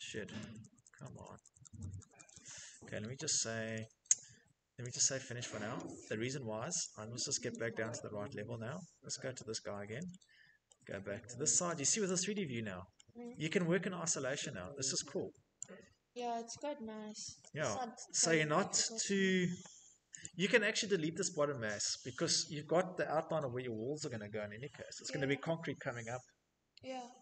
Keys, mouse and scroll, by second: 1.9 Escape, 2.4 Escape, 8.6 click, 9.8 shift+middle click, 11.1 click, 12.5 shift+middle click, 14.6 click, 14.6 shift+scroll, 16.5-17.3 scroll, 17.6 Escape, 19.3 click, 19.6-20.0 scroll.